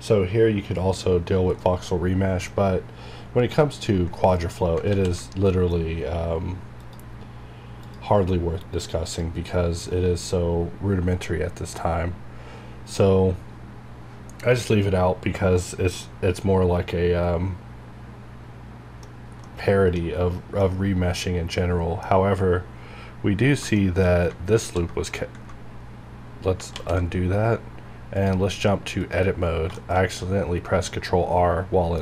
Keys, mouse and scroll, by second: 1.6-4.3 middle drag, 4.3 scroll down 1, 4.9 ctrl+z, 5.5 middle click, 6.8 click, 16.0 middle click, 16.0-22.1 middle drag, 22.1 scroll up 1, 23.3 scroll down 1, 23.7 shift+middle click, 24.1 shift+scroll up 1, 24.6 ctrl+r, 25.6-26.0 scroll down 1, 26.5 scroll up 1, 26.7 ctrl+z, 27.3 scroll up 1, 28.1 click, 29.1 click, 29.5 scroll down 1, 29.7 shift+middle click, 31.9-32.0 scroll up 1.